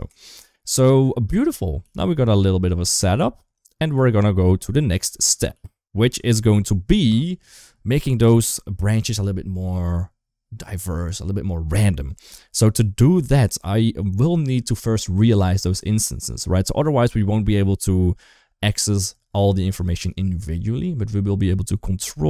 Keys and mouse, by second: 0.1 shift+middle click, 1.2 click, 1.7 g, 3.1 shift+middle click, 3.4 click, 3.8 g, 5.4 g, 6.2 ctrl+s, 6.9 shift+middle click, 13.2 shift+middle click, 15.5 click, 22.0-22.2 middle drag.